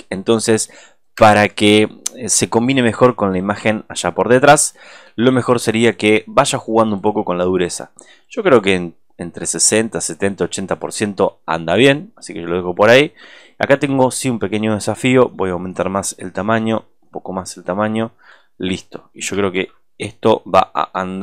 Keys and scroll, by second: 0.7 alt+space, 19.4 super+-.